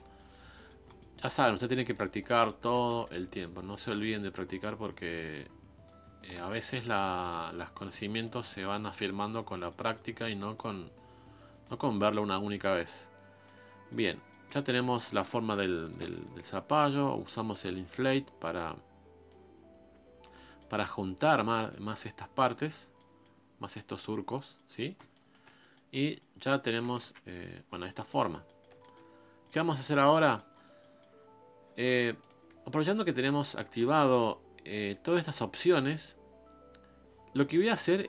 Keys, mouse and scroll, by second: 0.0 scroll down 2, 0.1-2.7 middle drag, 2.7 shift+c, 3.0 f, 3.6-4.6 scroll up 1, 4.6-6.0 drag, 6.0 scroll down 1, 6.3 ctrl+z, 6.4 middle click, 7.2 shift+f, 8.8-9.6 scroll up 2, 9.6 scroll up 1, 9.7 middle click, 10.5-11.7 drag, 11.7 middle click, 12.7 click, 13.6 scroll down 3, 13.9 middle click, 14.6 scroll up 3, 14.8 middle click, 15.5 p, 15.9 middle click, 16.4 f, 17.9-20.4 drag, 20.4 middle click, 20.9 click, 21.5-23.7 middle drag, 23.7 click, 24.3 scroll down 1, 24.5 middle click, 24.8 scroll up 2, 25.1 shift+click, 25.4 scroll down 1, 25.6 middle click, 25.9-26.2 scroll up 2, 26.2 middle click, 26.5 scroll down 1, 27.0 KP_1, 27.6 scroll up 4, 27.9 middle click, 28.2 scroll down 1, 28.4 middle click, 29.2 scroll down 1, 29.4 middle click, 29.8-30.2 scroll up 1, 30.2 middle click, 30.5-30.8 scroll up 1, 30.8-32.2 middle drag, 32.2 click, 32.5 scroll up 3, 32.7 f, 37.4-38.0 middle drag.